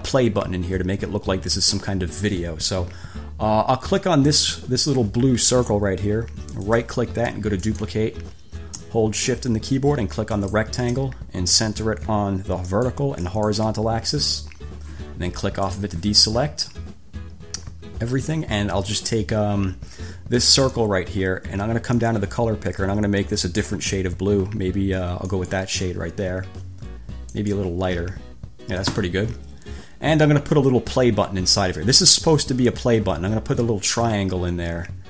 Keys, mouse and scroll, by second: 4.5 click, 6.9 click, 7.9 click, 10.5 shift+click, 12.9 click, 13.5 click, 15.8 click, 20.6 click, 22.2-24.0 drag, 25.5 click, 27.5 click.